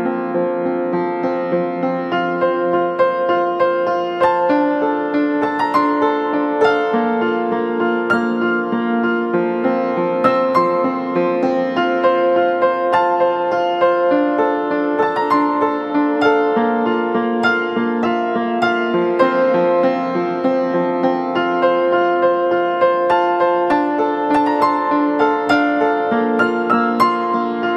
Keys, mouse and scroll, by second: 8.0 ctrl+click, 10.4 double click, 12.4 ctrl+Return, 17.4 double click, 19.0 [, 19.4 [, 19.6 [, 19.7-20.9 [, 22.1 [, 26.2 typing, 26.5 ctrl+d.